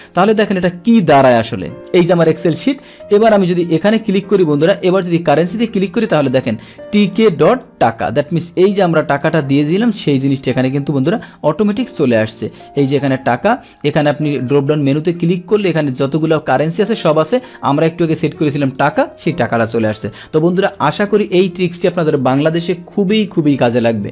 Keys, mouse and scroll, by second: 0.1 click, 1.7 click, 3.3 click, 5.3 click, 7.0 click, 7.5 click, 8.3 click, 10.3 click, 11.6 click, 12.2 click, 13.0 click, 14.3 click, 18.7 click, 19.9 click, 21.3 click.